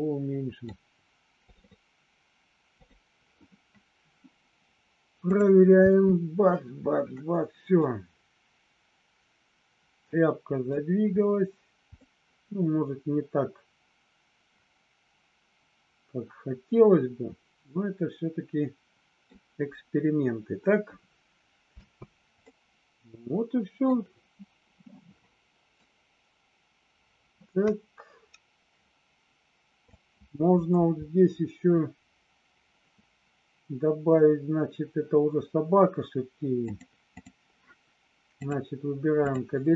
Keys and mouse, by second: 5.8 space, 7.9-10.6 middle drag, 12.0-19.4 middle drag, 21.9 space, 22.4-23.8 middle drag, 25.8-29.9 drag, 36.7 click, 39.3 click.